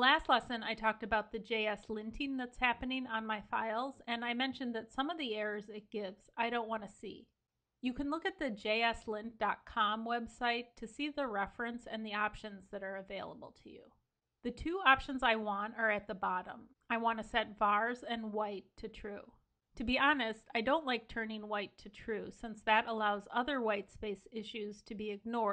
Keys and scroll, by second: 0.3 super+s.